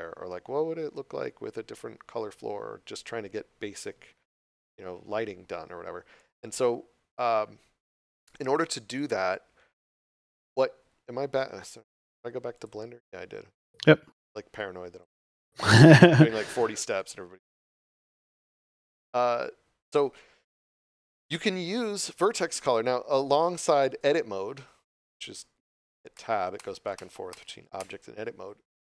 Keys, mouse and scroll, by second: 9.8 Tab, 11.6 click, 16.9 right click, 26.1 Tab.